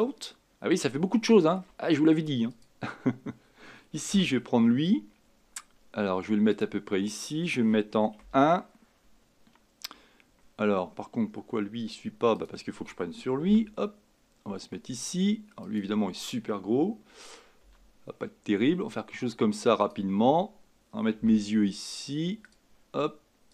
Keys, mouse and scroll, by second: 0.4-0.9 scroll down 3, 0.9-2.6 shift+middle drag, 2.6 click, 4.1 g, 8.2 KP_1, 12.4 click, 13.5 g, 17.6 s, 21.3 g.